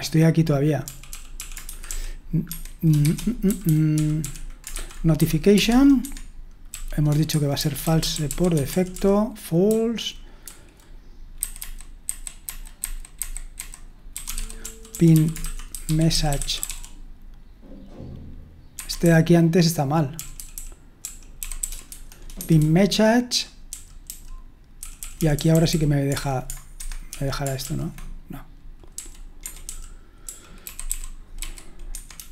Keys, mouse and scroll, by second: 0.9-5.2 typing, 2.5 Escape, 5.6 Tab, 6.0 Escape, 6.5-12.6 typing, 14.1-17.2 typing, 18.7 Escape, 19.0-23.3 typing, 24.8-27.6 typing, 26.8 Escape, 28.9-32.3 typing.